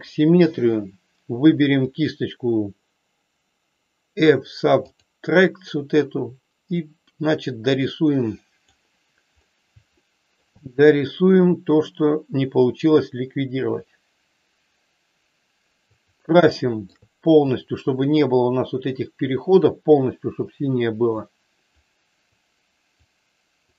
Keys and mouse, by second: 1.9-5.0 drag, 6.9-8.6 drag, 9.9 shift+middle click, 11.1-16.0 drag, 16.5 shift+middle click, 17.5-21.1 drag, 21.9 click, 23.1 click.